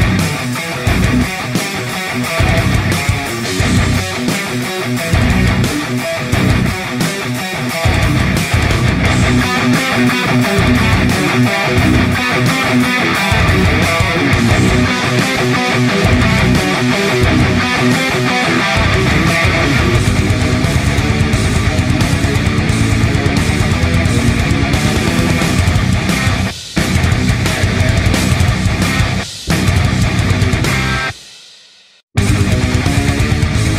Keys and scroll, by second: 16.0-16.4 typing, 18.1-18.5 typing, 28.1-30.0 space.